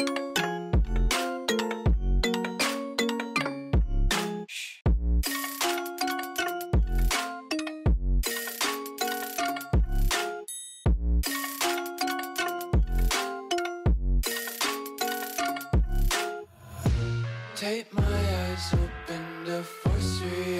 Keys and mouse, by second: 0.0-3.1 typing, 0.0 alt+m, 0.5 ctrl+r, 3.0 click, 4.0 click, 5.0 Delete, 5.2 click, 5.9-8.4 typing, 6.3 alt+m, 6.8 ctrl+r, 9.7-11.9 typing, 11.6 alt+h, 18.0 a, 18.7 right click, 19.3 Delete, 20.2 right click, 20.3 e.